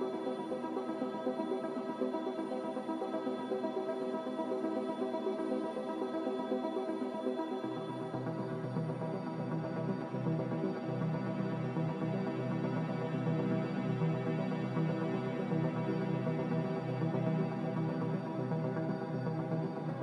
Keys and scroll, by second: 6.2 Delete, 7.0 Delete.